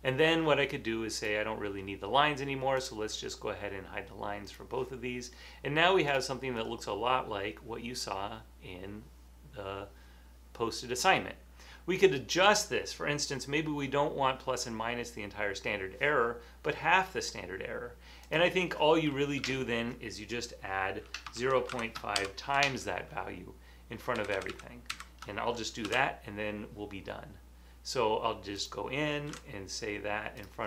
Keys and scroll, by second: 19.5 Left, 21.2-22.7 typing, 24.3 shift+Left, 24.5 shift+Left, 24.9 shift+Left, 25.9 super+c, 29.4 super+v.